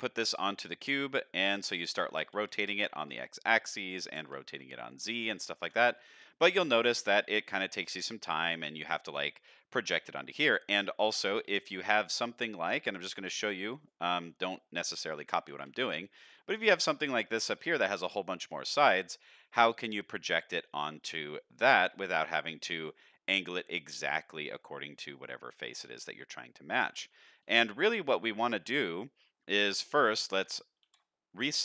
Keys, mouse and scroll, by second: 0.1 middle drag, 1.0 middle drag, 2.1 r, 4.0 r, 5.9-6.4 middle drag, 7.1 middle drag, 10.5-10.9 middle drag, 11.4 shift+a, 14.7-15.1 middle drag, 15.1 g, 17.2-17.6 shift+middle drag, 18.0 middle click, 18.4-18.8 scroll down 2, 18.8-19.2 middle drag, 19.9 middle drag, 20.8 middle drag, 22.1 shift+middle drag, 22.6 middle drag, 23.5 middle drag, 24.6 middle click, 25.5-26.8 middle drag, 27.1 shift+middle drag, 28.1 click, 28.5 shift+middle drag, 29.2 middle drag, 30.8 alt+r.